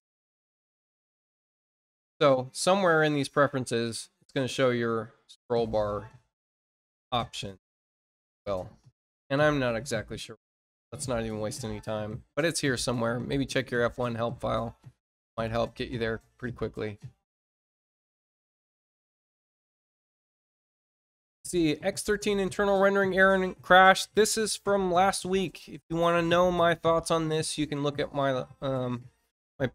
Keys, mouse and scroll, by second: 2.8 click, 13.5 click, 17.3 click.